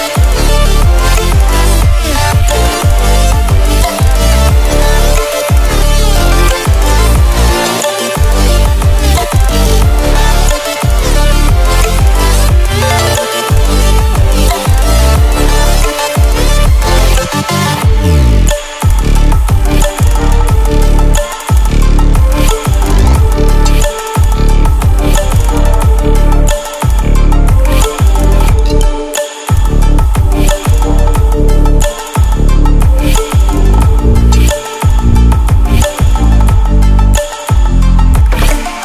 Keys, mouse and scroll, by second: 0.6-3.2 alt+shift+click, 4.2 ctrl+alt+scroll down 1, 5.4 ctrl+alt+scroll down 1, 5.9 ctrl+alt+scroll up 1, 7.4 ctrl+alt+scroll up 1, 8.1-8.4 ctrl+alt+scroll up 1, 9.6 click, 13.6 Caps_Lock, 15.3-17.2 typing, 18.2 click, 19.5 click, 23.0-27.1 drag, 29.1 ctrl+alt+scroll down 1, 29.8-32.6 drag, 33.0 ctrl+alt+scroll up 1, 33.8-35.0 alt+drag, 37.1 ctrl+a.